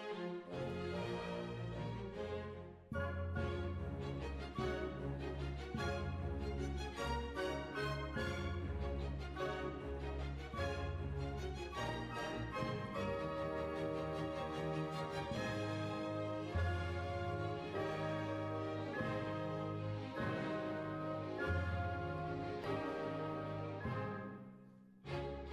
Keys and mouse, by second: 1.3 KP_3, 1.5 z, 3.3 right click, 4.0 g, 5.6 g, 5.7-7.3 middle drag, 7.3 z, 9.1 g, 10.2 ctrl+r, 12.1 KP_3, 12.8 ctrl+r, 14.6-16.4 middle drag, 17.2-18.6 middle drag, 19.4 click, 19.6 middle click, 20.8 right click, 23.1-25.5 drag.